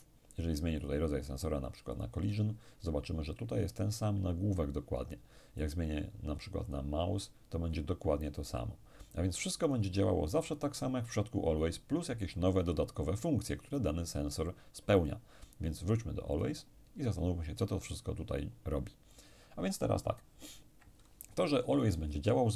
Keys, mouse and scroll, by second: 0.8 click, 1.9 click, 5.6 click, 6.9 click, 9.6 click, 15.0 click, 16.3 click.